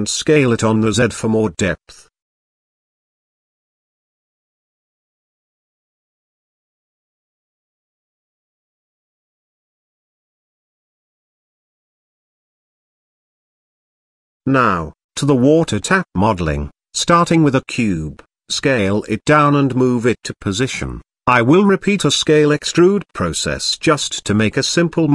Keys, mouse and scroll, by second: 0.2-0.8 middle drag, 1.3 middle click, 1.6 s, 3.2-4.7 drag, 5.1 s, 6.5-7.4 middle drag, 7.8 middle drag, 8.4 g, 10.0-11.6 middle drag, 12.2 shift+middle click, 12.6-13.3 middle drag, 15.8 click, 16.3 shift+a, 17.9 s, 20.8 s, 21.8 g, 23.9-24.5 middle drag, 24.7-25.1 shift+middle drag.